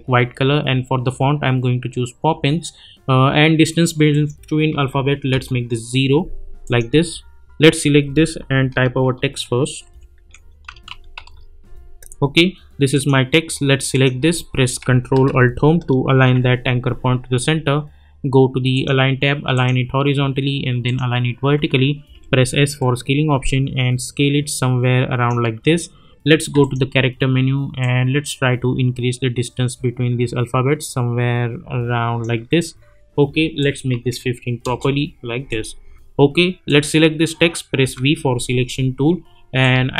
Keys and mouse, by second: 4.1 click, 5.3 Return, 6.6 click, 9.0-11.6 typing, 12.9 click, 16.1 ctrl+alt+Home, 18.7 click, 22.1 s, 22.8-25.2 drag, 34.6 Return, 35.5 click, 37.8 v, 39.6-39.9 drag.